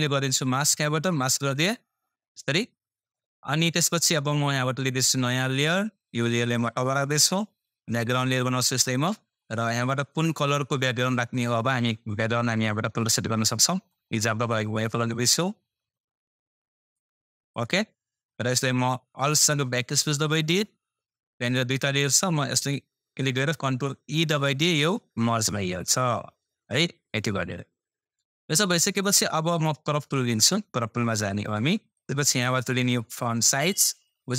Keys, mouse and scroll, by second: 0.6-1.0 scroll up 1, 5.0-23.5 drag.